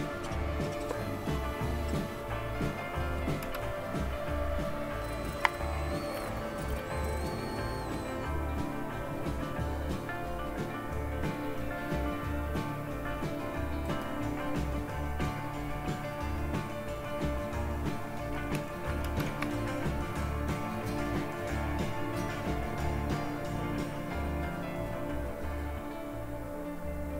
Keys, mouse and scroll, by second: 3.3 Return, 6.0 click, 6.1 typing, 6.3 Return, 13.9 click, 18.9 super+Return, 27.0-27.1 typing.